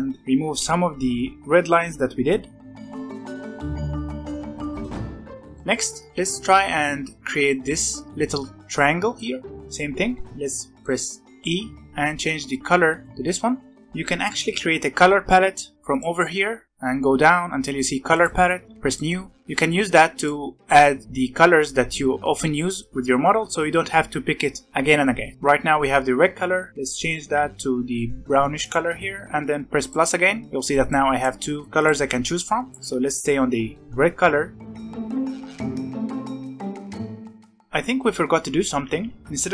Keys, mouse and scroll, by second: 2.2-3.4 drag, 3.4 ctrl+z, 3.5 ctrl+z, 3.6-4.1 drag, 4.4 click, 4.8-5.5 scroll down 4, 4.9-5.3 middle drag, 5.5 middle click, 5.8-6.2 scroll up 5, 6.1 middle click, 9.1 middle click, 9.5 scroll up 1, 10.7 middle click, 11.2 scroll up 1, 11.3 middle click, 11.8 e, 13.9 scroll down 2, 14.1-15.9 scroll up 1, 15.9 click, 16.6-18.1 scroll down 11, 18.1 click, 18.5-18.8 scroll down 1, 18.8-21.0 drag, 27.1 e, 29.7-30.8 drag, 31.0 click, 31.5 click, 32.7 click, 33.7-34.8 scroll up 7, 34.8 f, 34.9 f, 35.1-35.9 drag, 36.1-36.9 drag, 36.9 ctrl+z, 37.2 click, 37.4 scroll down 5, 37.5 scroll up 2, 38.6 ctrl+z, 39.0 ctrl+z, 39.1-39.5 scroll up 1.